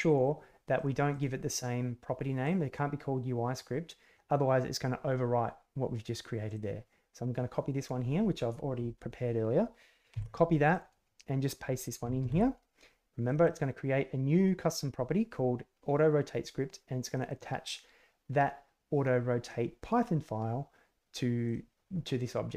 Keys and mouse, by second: 12.1 ctrl+v, 17.1 click, 21.5 click.